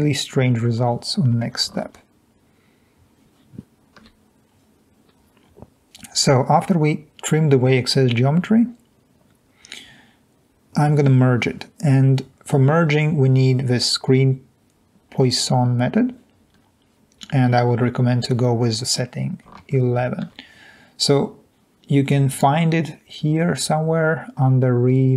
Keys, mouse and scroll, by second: 0.3 click, 4.8 alt+Tab, 21.0 alt+Tab.